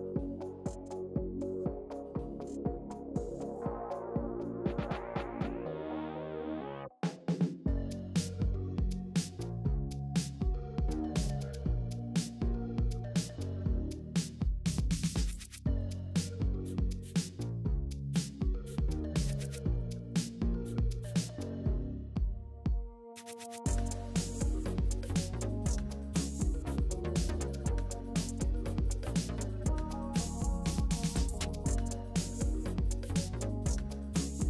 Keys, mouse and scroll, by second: 0.3 click, 2.1-2.6 middle drag, 2.6 space, 5.3 space, 5.6 space, 6.0 space, 6.3-7.8 drag, 10.2 click, 12.9-20.3 drag, 22.7 click, 25.1 click, 26.7 click, 27.2 click, 27.5 click, 28.0 click, 29.2 click, 31.9-34.4 right drag.